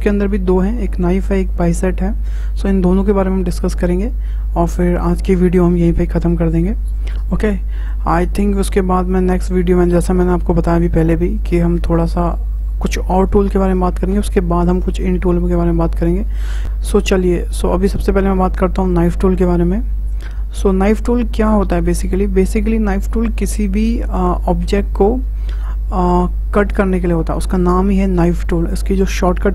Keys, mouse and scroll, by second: 17.7-20.7 drag, 21.3-24.3 middle drag.